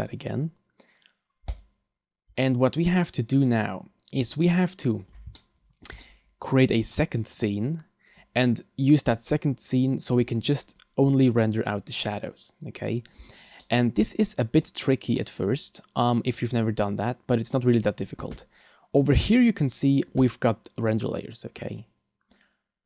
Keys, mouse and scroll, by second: 4.3 middle click, 5.3 shift+middle click, 6.0 middle click, 13.6 middle click, 14.7-15.1 scroll down 2, 15.2 middle click, 19.0 click.